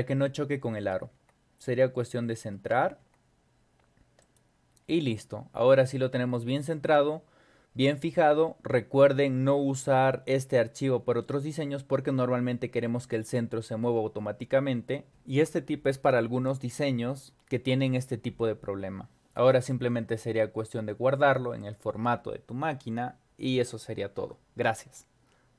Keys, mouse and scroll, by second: 0.2-0.7 scroll down 4, 1.1 Up, 1.6 Up, 2.6 Down, 3.0 Up, 4.2 click, 21.6 click.